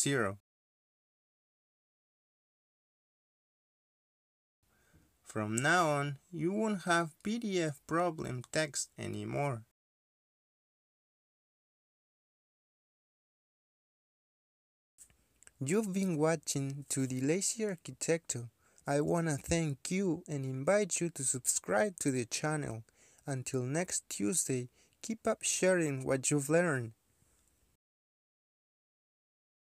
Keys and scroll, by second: 2.5 Return, 4.1 0, 4.6 Return, 6.2 ctrl+p, 11.6 Escape, 17.8 2.